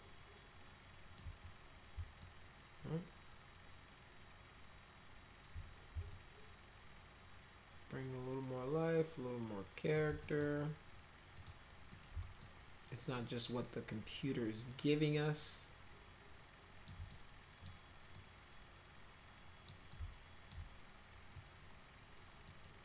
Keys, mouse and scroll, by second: 2.2-5.4 alt+middle drag, 6.1-9.9 alt+middle drag, 10.2 middle click, 11.3 click, 11.9 middle click, 12.4-16.8 alt+middle drag, 17.1 middle click, 18.1-19.6 middle drag, 19.9-20.5 alt+middle drag, 22.5 middle click.